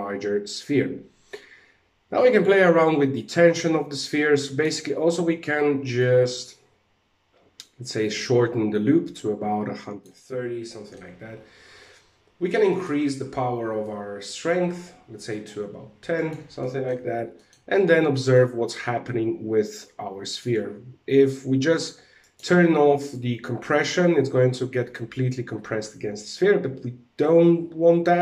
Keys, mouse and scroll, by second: 0.7-1.2 scroll up 2, 1.7 click, 5.5 click, 10.2 middle click, 12.2 right click, 13.4 click, 15.7 right click, 16.1 middle click, 16.9 shift+middle click, 17.1-17.5 scroll up 3, 17.7 shift+middle click, 19.9 click, 22.6 click.